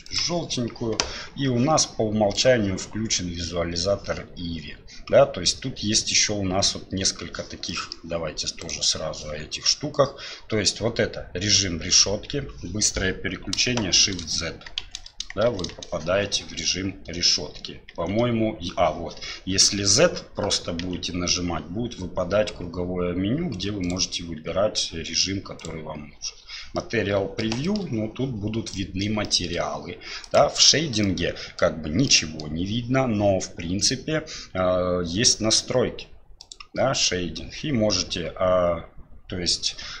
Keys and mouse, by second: 2.3 click, 7.8 middle click, 8.6-13.7 drag, 14.0 shift+z, 14.8 shift+z, 15.5 shift+z, 17.9 z, 20.8 z, 24.4 z, 26.8-27.4 middle drag, 27.7 shift+middle click, 28.8 middle click, 29.3-30.2 shift+middle drag, 30.2 click, 31.0-31.6 middle drag, 32.1-32.4 middle drag, 36.4-40.0 drag.